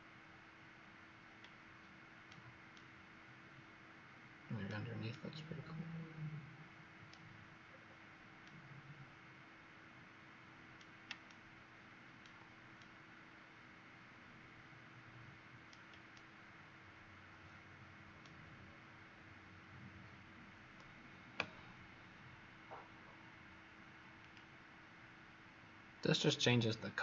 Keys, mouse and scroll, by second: 2.6 right click, 7.6-8.4 scroll down 3, 8.4 right click, 10.1 right click, 10.2 right click, 11.2 shift+right click, 12.7 right click, 16.0 shift+right click, 18.8-22.1 scroll up 2, 24.1 click.